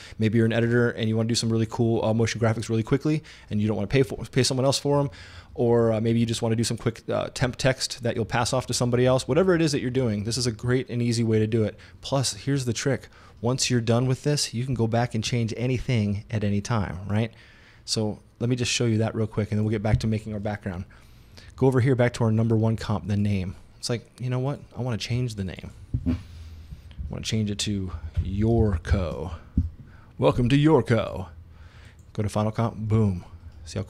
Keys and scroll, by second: 27.8-30.3 typing.